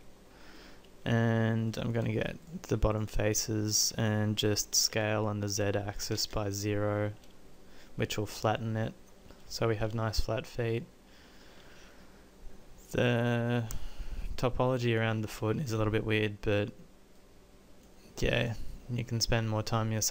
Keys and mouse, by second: 4.9 s, 7.0-9.2 middle drag, 16.0-17.9 middle drag, 18.5 middle click.